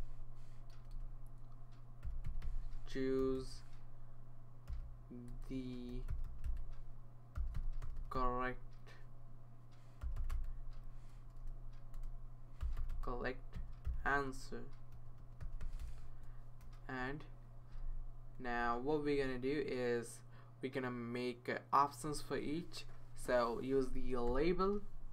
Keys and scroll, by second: 0.0-8.6 typing, 9.8-17.1 typing, 17.6 Right, 17.8 Right, 17.9 Right, 18.6 Right, 19.2 Return, 24.3 i.